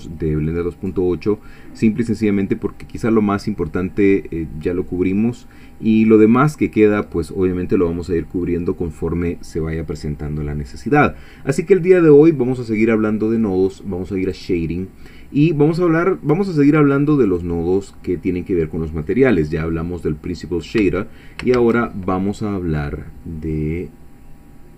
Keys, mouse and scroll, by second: 14.2 click, 17.3 click, 20.9 x, 21.6 shift+a.